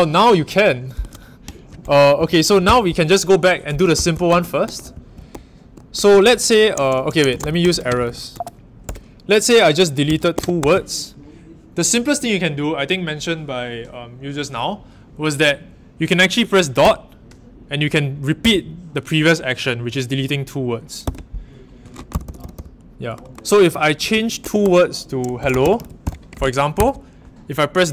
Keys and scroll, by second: 1.0 super+Tab, 2.6 shift+Return, 3.7-8.5 typing, 8.8 Return, 9.8-11.0 typing, 22.2-22.5 typing, 23.7-26.5 typing, 26.7 Escape.